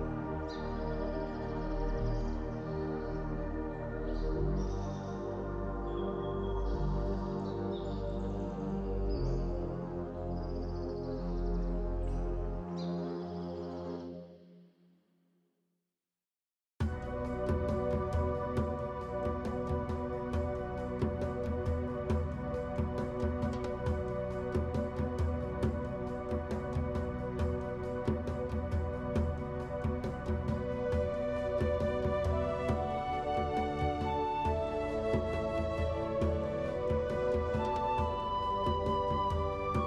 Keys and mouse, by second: 6.1 click, 8.4 ctrl+r, 10.2 shift+click, 10.6 click, 13.8 click, 19.5 click, 21.3 alt+click, 22.6 alt+shift+click, 23.2 alt+shift+click, 23.6 alt+shift+click, 24.9 click, 33.8 click, 34.4 alt+click, 37.7 middle click, 38.6 click, 38.6 middle click.